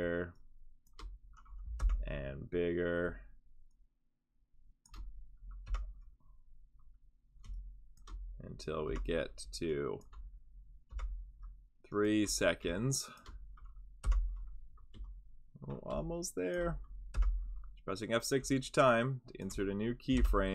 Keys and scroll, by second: 1.8 F6, 5.6 F6, 8.9 F6, 10.9 F6, 14.0 F6, 17.1 F6, 20.1 F6.